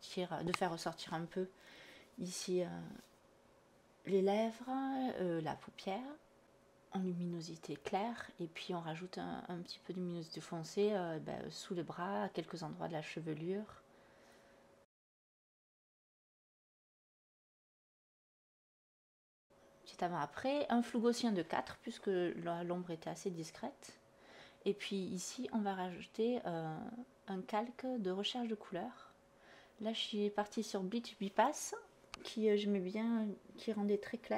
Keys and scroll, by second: 0.2 /, 1.9 /, 9.7 /, 16.7 /, 22.6 4.